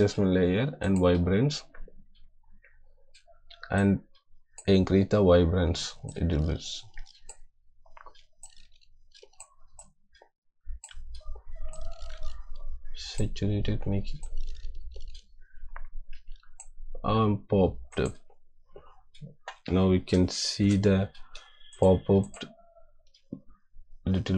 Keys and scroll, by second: 20.2 =.